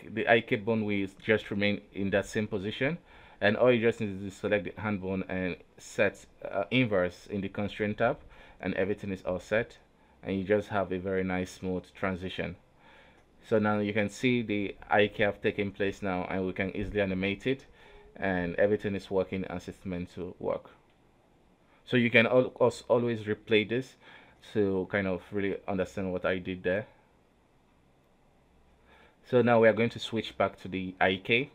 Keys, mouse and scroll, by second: 0.3 g, 2.2 i, 2.8 a, 3.5 i, 4.0-6.9 right drag, 6.9 click, 7.5 a, 8.2 i, 8.7 Left, 9.3 Right, 9.7 Left, 10.1 Left, 10.8 Left, 11.1 Down, 11.7 Up, 12.2 Right, 13.9-15.2 drag, 15.2 right click, 15.2 g, 16.1 right click, 17.0 right click, 18.0 click, 18.7 r, 19.9 right click, 20.1 r, 21.2 right click, 21.3 r, 22.3 r, 24.0 a, 24.8 u, 25.0 i, 25.6-28.6 drag.